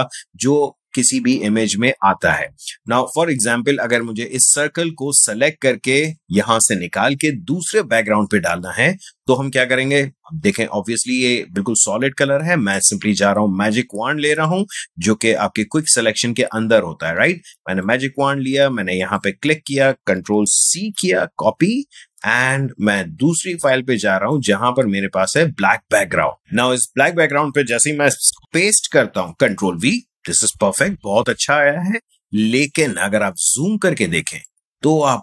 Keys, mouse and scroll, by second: 2.4 space, 2.8 ctrl+click, 3.0 ctrl+space, 5.0 space, 5.3 click, 5.5 space, 12.7-19.0 drag, 20.8 ctrl+c, 22.6 ctrl+Tab, 23.4 space, 23.7 click, 23.9 space, 27.5 space, 28.5 ctrl+v, 32.3 space, 32.8-35.2 ctrl+drag.